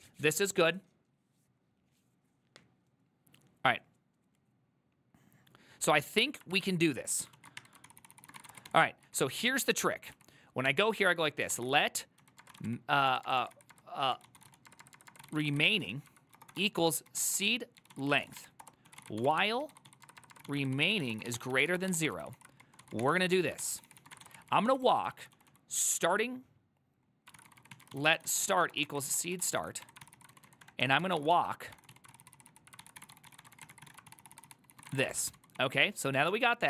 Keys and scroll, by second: 7.4 ctrl+a, 7.7-25.3 typing, 7.9 ctrl+c, 8.1 ctrl+c, 8.2 ctrl+c, 27.2-36.6 typing, 32.6 ctrl+c.